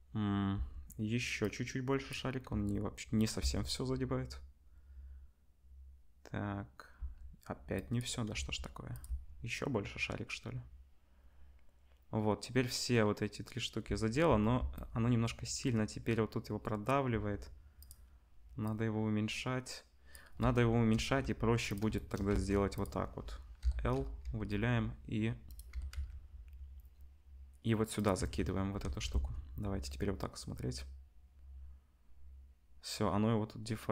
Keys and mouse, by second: 0.5 space, 1.4-3.3 drag, 2.4 s, 3.3-7.7 middle drag, 3.3 space, 7.0 space, 7.7-9.0 drag, 8.3 s, 9.0-18.6 middle drag, 9.0 space, 13.9 space, 14.2 space, 17.1 s, 18.6-21.7 drag, 20.7 KP_0, 21.7-28.1 shift+middle drag, 22.3 Tab, 23.6 l, 24.2 g, 25.7 g, 28.1 Tab, 28.8 ctrl+s, 29.5 space.